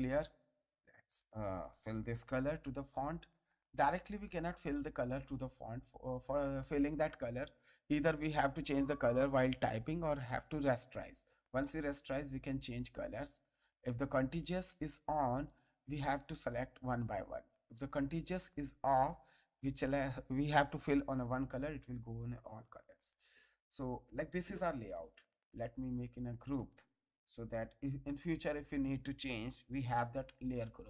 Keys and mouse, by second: 0.4 ctrl+Tab, 2.2 g, 3.6 alt+click, 4.5 ctrl+Tab, 6.1 click, 10.3 click, 11.7 click, 15.4 click, 18.9 click, 20.8 click, 23.0 space, 23.4 ctrl+click, 24.4 ctrl+space, 24.5 ctrl+click, 26.0 ctrl+click, 27.9 ctrl+g, 30.0 ctrl+j.